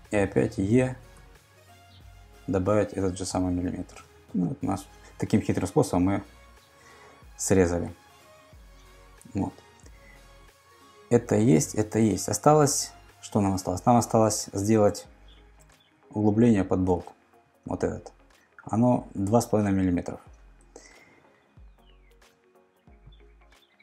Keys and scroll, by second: 1.1 e, 2.5 1, 3.9 Return, 16.9 super+Tab, 22.2 super+Tab.